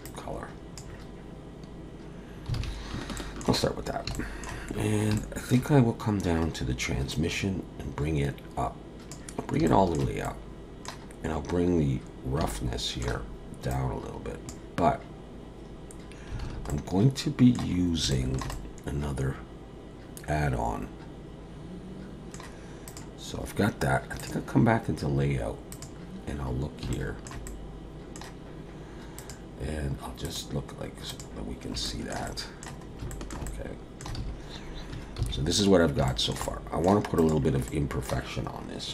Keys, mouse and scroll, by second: 24.2 click, 25.8 click, 26.4-26.8 scroll up 4, 26.9 shift+middle click, 27.5 middle click, 29.2 click, 31.6 scroll up 2, 31.9 shift+middle click, 32.9-33.3 scroll up 2, 33.1 shift+middle click, 33.5 middle click, 34.2 alt+a, 35.2 ctrl+s, 35.7 scroll down 1, 36.1 shift+middle click, 36.5 middle click, 37.2 click, 37.7 middle click.